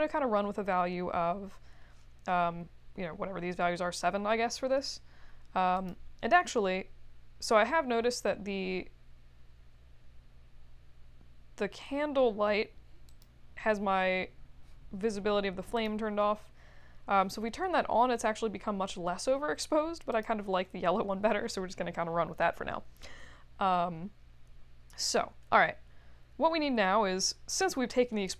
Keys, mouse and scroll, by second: 5.8 click, 13.0 click, 15.7 click, 20.1 click.